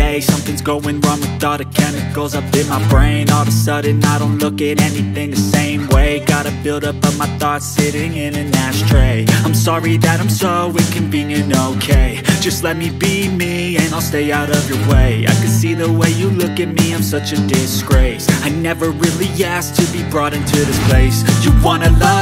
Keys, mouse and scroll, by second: 0.9-2.5 drag, 3.2 click, 7.3 click, 7.9 space, 8.3-9.5 scroll up 3, 9.5-10.5 drag, 10.5 scroll down 1, 13.6 space, 14.0 Left, 15.3 drag, 15.8 shift+d, 16.5 s, 17.8-18.4 drag.